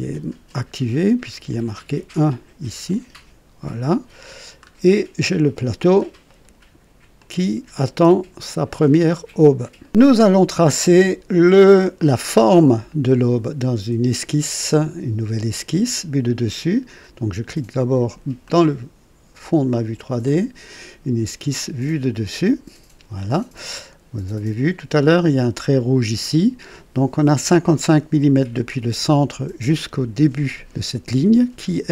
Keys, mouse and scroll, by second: 2.9 click, 4.2-5.0 scroll down 3, 5.3 click, 6.3 right click, 7.2-8.5 drag, 9.8 right click, 9.9 click, 10.8-11.9 drag, 12.0 click, 18.4 click, 20.2 click, 22.4 click, 24.7 click.